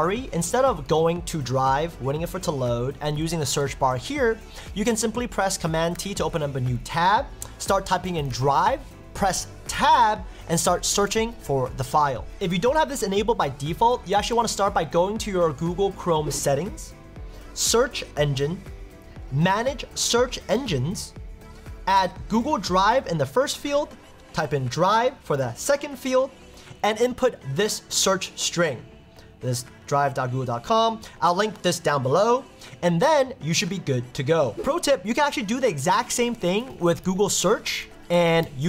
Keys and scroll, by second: 6.0 super+t, 9.7 Tab, 36.2 super+t, 37.2 Tab, 37.8 super+t, 38.4 Tab.